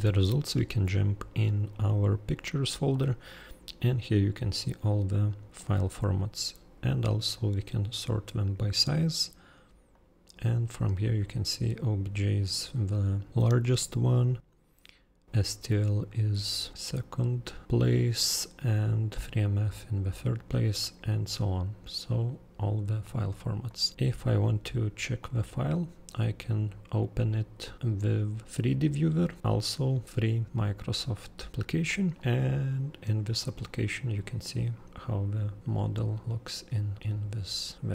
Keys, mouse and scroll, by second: 5.5-7.3 drag, 10.0 click, 23.7 click, 25.2 click, 31.9 click, 35.6 click, 35.7 click, 36.2 click.